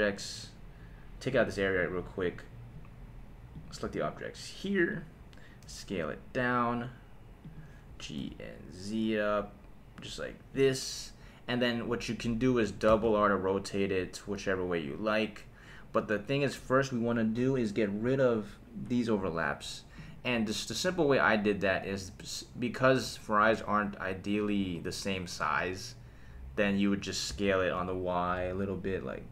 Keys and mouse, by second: 1.3 click, 1.8 drag, 3.5 click, 3.9-5.0 right drag, 5.6 s, 7.4 click, 7.9 g, 8.2 z, 10.5 click, 12.9 r, 13.0 r, 16.5 Escape, 20.0 click, 27.3 s, 27.8 y.